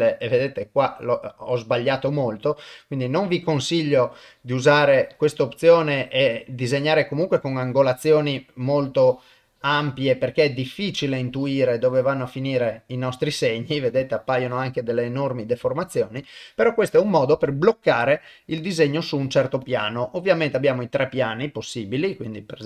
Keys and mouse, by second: 1.0 middle click, 2.1 shift+middle click, 2.5-3.9 middle drag, 5.4-6.6 middle drag, 7.4-9.8 drag, 10.3-12.0 drag, 12.3-13.4 middle drag, 15.8 ctrl+middle click, 17.3-18.9 middle drag, 19.6-22.6 drag.